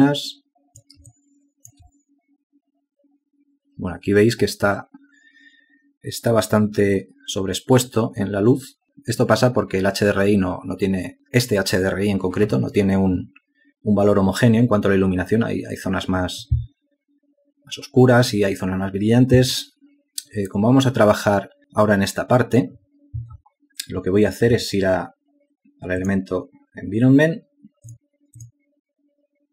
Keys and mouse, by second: 3.3 alt+shift+click.